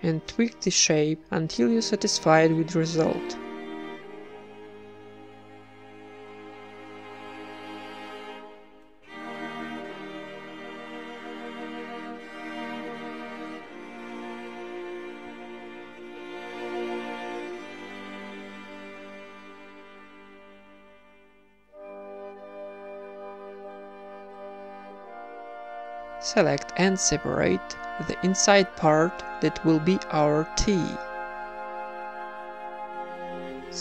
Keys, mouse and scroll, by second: 0.8 ctrl+b, 1.0-2.4 middle drag, 4.7 a, 4.9-5.9 right drag, 5.2 g, 5.9 alt+s, 6.8 middle click, 8.0 z, 8.9 z, 9.1-10.1 middle drag, 9.5 ctrl+Tab, 10.1 right click, 10.8 ctrl+KP_Add, 11.1 ctrl+KP_Add, 11.2 ctrl+KP_Add, 11.3 ctrl+KP_Add, 11.7 KP_1, 12.1 s, 13.2 g, 14.0 s, 15.5 g, 16.3 middle click, 16.6 ctrl+KP_Add, 17.0-23.7 typing, 17.8 click, 18.1 Tab, 18.5 ctrl+2, 19.4 Tab, 21.1-22.2 drag, 23.5 click, 24.5 Tab, 24.7 Tab, 24.8-26.7 typing, 25.6 Tab, 25.7 ctrl+w, 25.7 middle click, 26.1 Tab, 26.4 Tab, 27.1 click, 28.1 ctrl+KP_Add, 28.3-28.9 ctrl+KP_Add, 30.2 shift+d, 30.9 p, 31.1 Tab, 31.4 click, 31.7 z, 32.1-33.3 right drag, 32.4 Tab, 32.7 a, 32.9 alt+s.